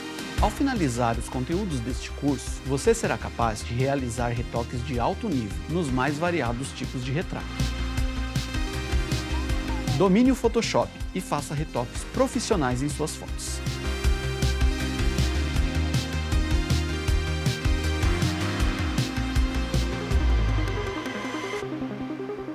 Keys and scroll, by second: 8.4 super+=.